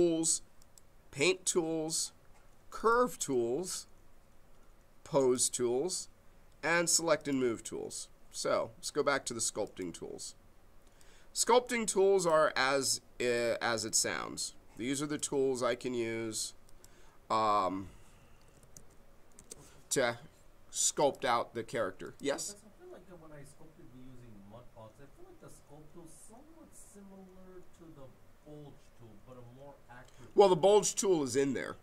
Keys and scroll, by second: 18.0-19.2 typing, 19.3 Return.